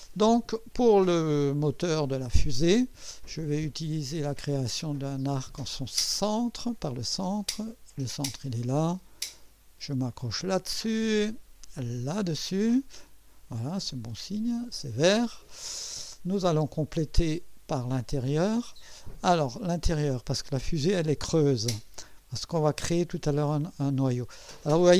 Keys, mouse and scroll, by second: 0.0 scroll down 2, 3.9 click, 6.3 click, 8.0 click, 10.1 click, 11.9 click, 13.3 scroll up 1, 13.9 right click, 18.4 click, 21.1 click.